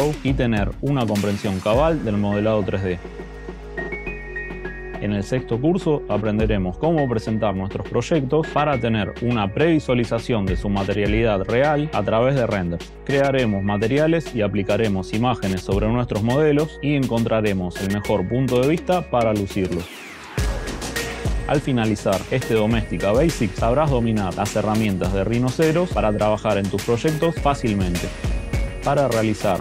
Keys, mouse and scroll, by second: 0.0 right click, 0.0 click, 0.3 click, 0.3 scroll down 4, 0.3 shift+click, 0.5 middle click, 0.7 shift+click, 0.7 middle click, 0.7 shift+click, 1.5 right click, 7.6 click, 8.4 middle click, 8.5 click, 9.0 click, 9.6-9.9 scroll, 10.2 Escape, 10.3 Escape, 10.3 Escape, 10.5 scroll, 10.9 click, 10.9 right click, 12.1 click, 12.3-13.6 typing, 12.3 click, 12.7 click, 12.8 click, 13.0 click, 13.2 click, 13.3 click, 13.3 scroll, 13.7 click, 14.3 scroll, 15.3 click, 15.5 right click, 15.5 scroll up 1, 16.5 right click, 16.5 scroll, 17.1 scroll, 17.5 right click, 17.7 right click, 27.3 right click, 27.7 right click, 28.3 click, 28.6 click.